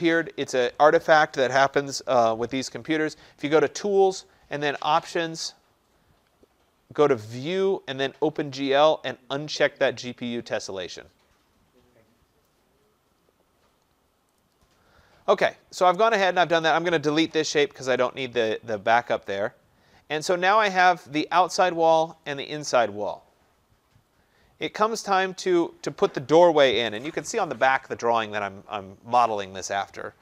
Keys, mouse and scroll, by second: 3.7 click, 4.9 click, 14.4 click, 15.9 click, 16.6 click, 17.4 Delete, 19.0 middle click, 19.2 middle click, 21.2 click, 22.5 click, 24.1-24.7 scroll down 2, 24.7-28.0 scroll up 4.